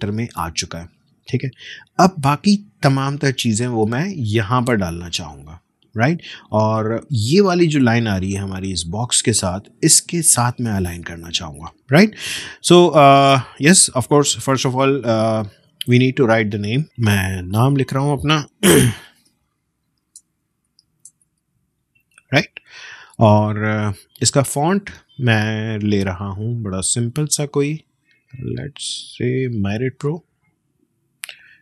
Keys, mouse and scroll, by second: 1.7 click, 1.7 space, 1.7 click, 1.9 space, 11.9 space, 13.4 click, 16.8 click, 18.8-22.1 typing, 23.1-27.5 drag, 28.8 click.